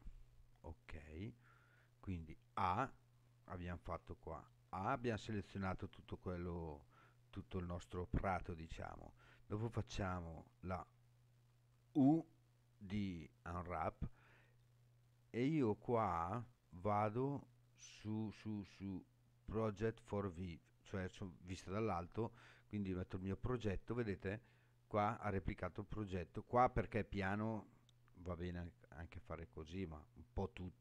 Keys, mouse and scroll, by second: 4.4 a, 11.5 u.